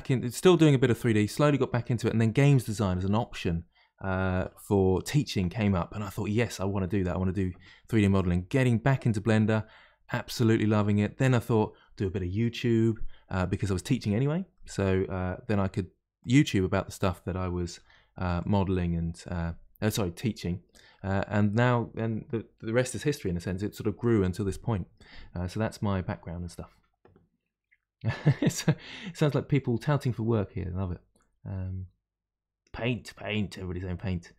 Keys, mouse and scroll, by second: 9.7-12.7 middle drag, 13.2-14.0 scroll up 3, 14.0-14.5 scroll up 1, 14.5-15.5 middle drag, 15.5 s, 16.4-17.7 middle drag, 17.7 r, 19.4-23.9 middle drag.